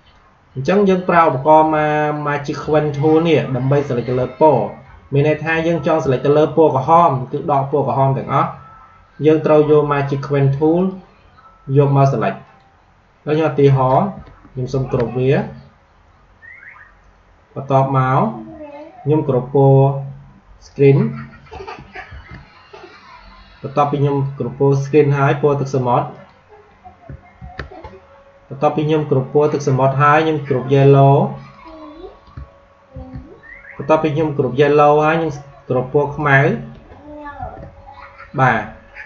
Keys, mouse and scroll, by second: 10.7 click, 14.6 ctrl+g, 20.6 click, 22.0 ctrl+g, 26.1 click, 27.3 ctrl+g, 31.5 click, 32.9 ctrl+g, 36.1 click, 37.3 ctrl+g.